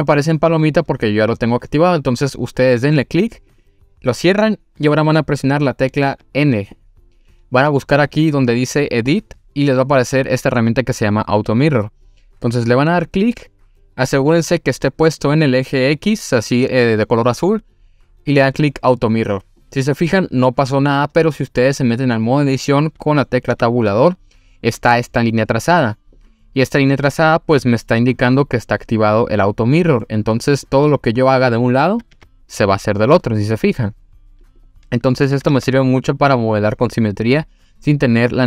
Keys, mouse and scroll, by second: 5.5 click, 6.1 n, 9.0 click, 12.5 click, 18.6 click, 23.1 click, 23.5 Tab, 24.0 scroll up 1, 30.0 middle click, 30.9 click, 32.1 g, 34.4 click, 35.5 ctrl+z.